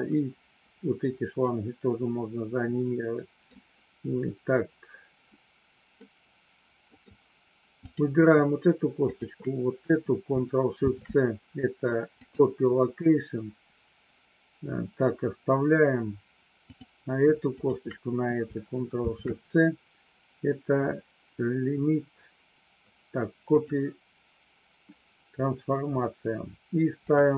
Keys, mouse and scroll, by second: 1.4-3.4 middle drag, 3.4-5.9 scroll down 1, 5.9 scroll down 1, 6.0-7.0 middle drag, 10.7 ctrl+shift+c, 17.5 shift+click, 27.1-27.3 drag.